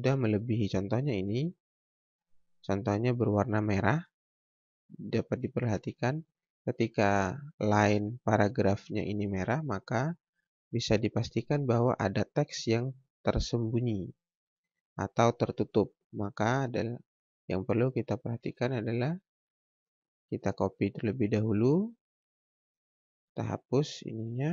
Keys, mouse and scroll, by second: 4.1 click, 4.9 scroll up 1, 10.1 scroll down 1, 11.9 click, 19.8 click, 21.5 shift+right click, 22.1 click, 23.5 ctrl+a, 24.3 Delete.